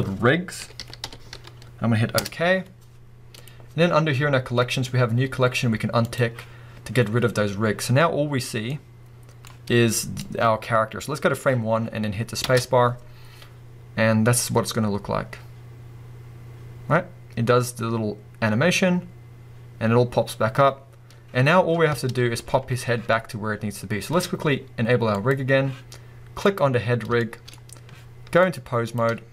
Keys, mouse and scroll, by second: 6.0 click, 7.0-7.6 scroll down 1, 7.6-8.6 scroll down 1, 8.6 scroll down 1, 8.7-10.2 middle drag, 10.2-25.3 drag, 11.5-11.9 scroll down 2, 11.9-12.4 scroll up 2, 12.4 space, 21.9 space, 22.3-25.1 scroll down 2, 26.4 click, 27.2-28.4 shift+middle drag, 28.4-29.3 drag.